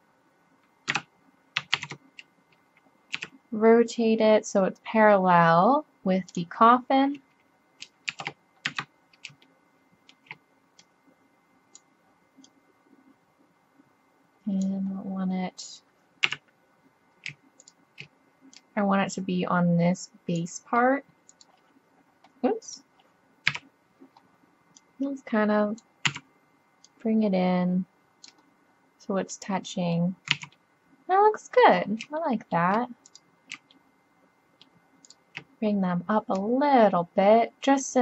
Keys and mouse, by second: 1.8 ctrl+z, 3.2 r, 8.1 shift+d, 10.6 click, 10.8 click, 13.0 click, 14.5-17.7 middle drag, 16.3 KP_1, 17.7-19.3 drag, 20.7-21.4 middle drag, 23.5 KP_7, 24.5 middle click, 26.1 z, 28.7-29.3 middle drag, 30.3 z, 33.1-34.9 drag, 37.0-38.0 drag.